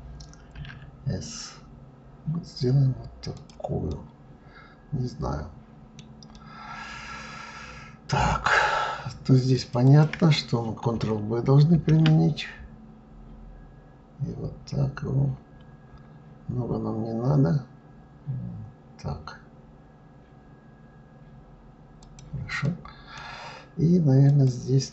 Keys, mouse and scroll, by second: 0.3 s, 3.6-9.0 middle drag, 9.2 click, 9.6 click, 11.4 ctrl+b, 22.3-24.0 middle drag, 24.0 click.